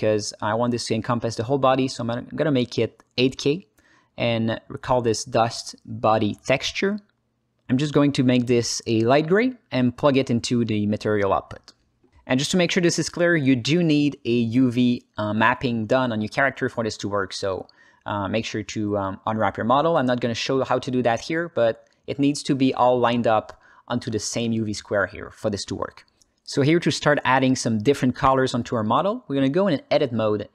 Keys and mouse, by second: 10.5-11.3 drag, 12.3 alt+z, 13.2 click, 14.0 alt+shift+z, 14.4 alt+middle click, 16.7 Tab, 17.2 ctrl+space, 18.9 Tab, 19.6 ctrl+space, 20.1 ctrl+alt+middle click, 20.5 ctrl+alt+middle click, 20.9 ctrl+alt+middle click, 21.4 alt+shift+middle click, 29.1 alt+middle click, 30.2-30.5 drag.